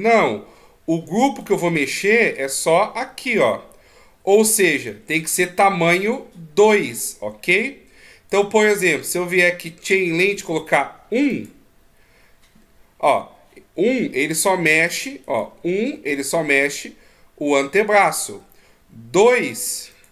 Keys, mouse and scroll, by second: 1.7-2.3 d, 2.4 click, 5.1 d, 5.5 right click, 5.5 d, 8.6 d, 9.0 d, 12.3 click, 12.4 click, 14.2 g, 15.6 right click, 16.3 g.